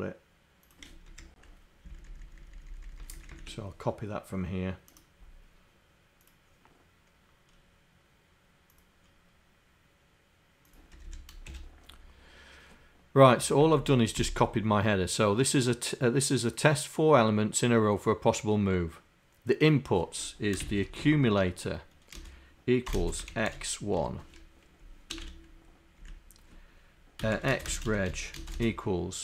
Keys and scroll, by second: 1.1 Home, 2.0 shift+Down, 2.7 shift+Down, 3.1 shift+Down.